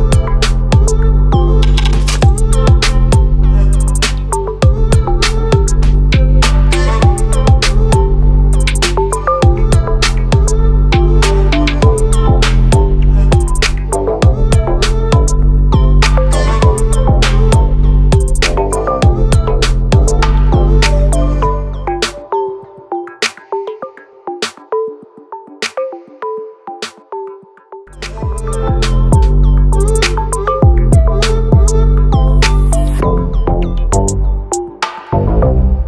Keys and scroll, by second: 2.1 ctrl+t, 15.1 ctrl+=, 21.5 ctrl+t.